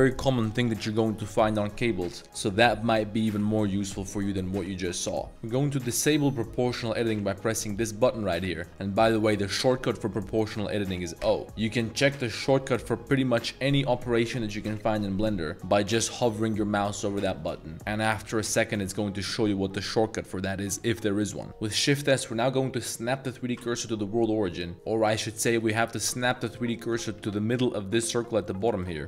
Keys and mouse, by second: 6.1-11.2 drag, 11.2 o, 21.5 shift+s, 24.2-24.6 middle drag, 24.9 1, 25.9 alt+click, 26.8 alt+click, 27.2 z, 27.9 middle click, 28.3 z, 28.5 middle click.